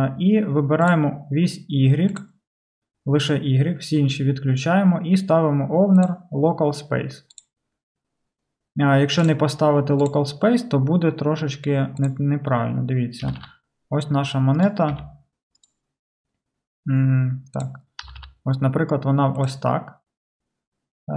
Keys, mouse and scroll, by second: 0.9 click, 0.9-2.2 middle drag, 2.2 click, 2.3-6.1 middle drag, 6.0-17.7 drag, 13.3 r, 15.0 r, 15.0 r, 17.7-21.1 middle drag, 18.1 r.